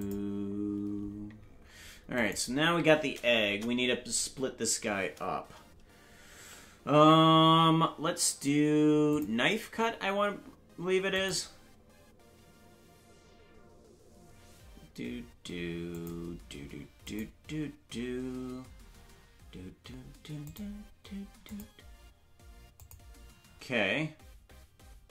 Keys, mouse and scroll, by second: 3.1 right click, 3.4 KP_0, 6.8 Tab, 9.0 click, 11.1-25.1 drag.